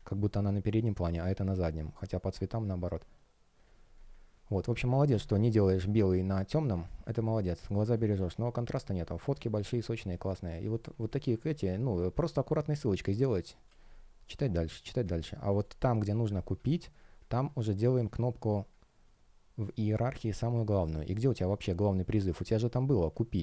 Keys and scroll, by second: 2.5 space, 5.3 space, 13.5 space, 18.4 space.